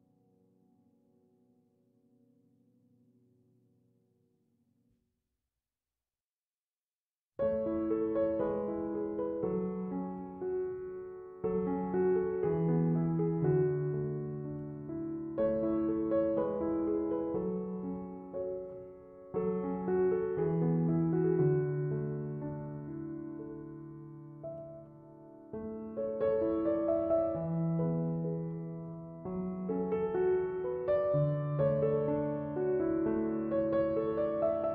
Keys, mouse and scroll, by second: 0.4 ctrl+7, 10.1 f.